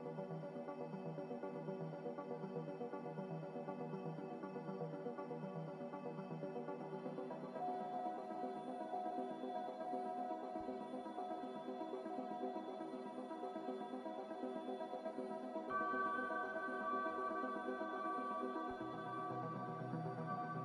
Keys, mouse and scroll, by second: 1.3 x, 2.7-3.7 typing, 5.4 a, 6.4 ctrl+c, 7.3 ctrl+r, 13.5 z, 17.7 c.